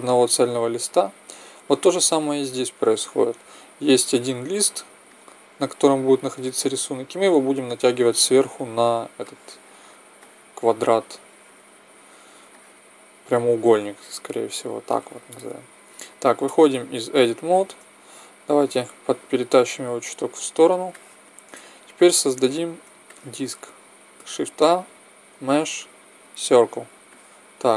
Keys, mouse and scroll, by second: 1.6-6.3 middle drag, 7.6 middle click, 10.2 middle click, 10.9 middle click, 11.8 middle click, 16.5 Tab, 18.6-20.0 drag, 20.9-21.3 drag, 24.3 shift+a.